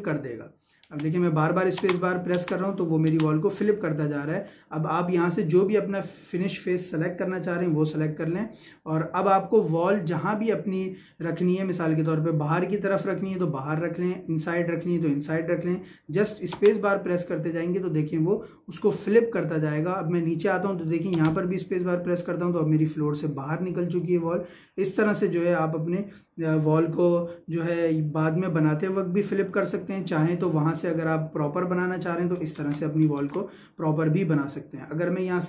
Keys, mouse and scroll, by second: 4.3 Escape, 5.4 click, 16.6 space, 18.9 click, 21.1 space, 24.0 click, 30.2 Escape.